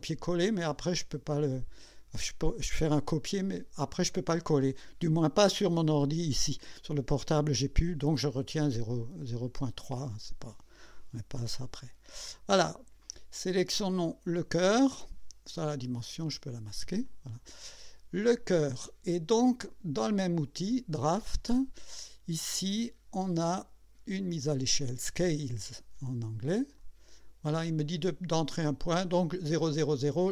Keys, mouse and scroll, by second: 10.0 click, 11.2-11.6 scroll down 1, 11.8 scroll up 1, 13.9 click, 16.0 click, 16.3 space, 17.1 click, 26.8 click.